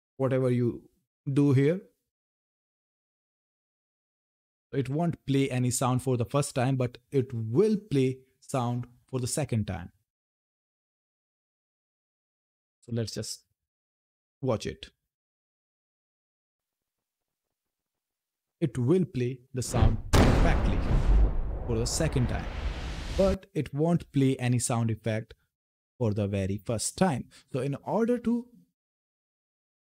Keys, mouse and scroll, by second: 28.9 click.